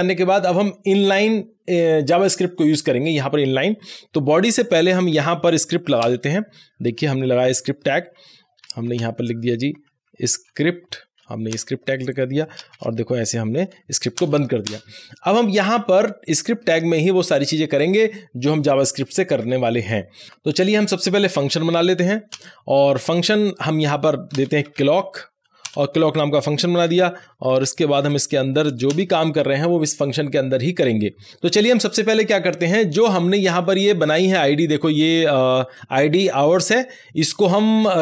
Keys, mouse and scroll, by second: 3.4 click, 3.5 scroll down 1, 4.9 click, 6.0 Return, 8.5 Return, 8.8-10.9 typing, 11.4 Return, 12.7 shift+., 14.1 Return, 15.2 Up, 16.6-17.7 scroll down 1, 17.7 click, 19.3 Tab, 20.2-22.0 typing, 22.2 Return, 22.8 Return, 24.2-26.8 typing, 27.5 Right, 28.2 shift+[, 28.8 Return, 33.2 click, 33.2 scroll up 1, 35.5 scroll down 1, 35.7-38.0 drag.